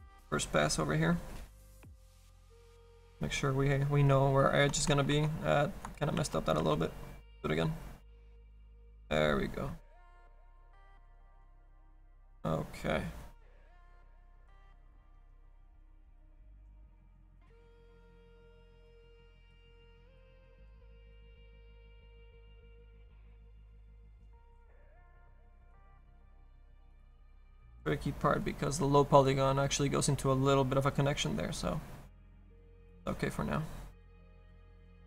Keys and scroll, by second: 5.0 ctrl+z, 6.3 ctrl+z, 21.3 s.